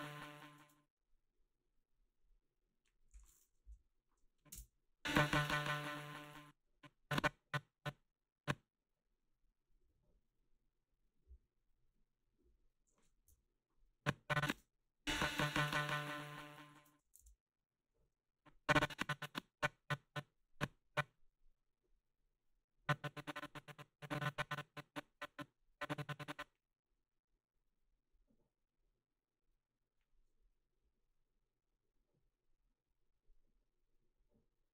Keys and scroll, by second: 0.6 space, 3.6 Delete, 4.5 space, 6.3 space, 13.3 Delete, 14.5 space, 16.7 space.